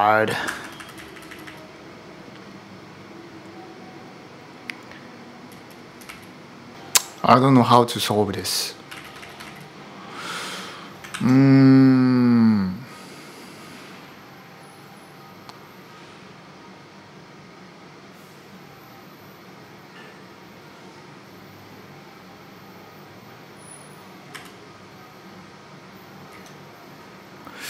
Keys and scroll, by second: 0.0-1.7 typing, 4.9-7.2 typing, 8.4-9.7 typing, 10.9 ctrl+u, 24.1 ctrl+u, 26.1 ctrl+d.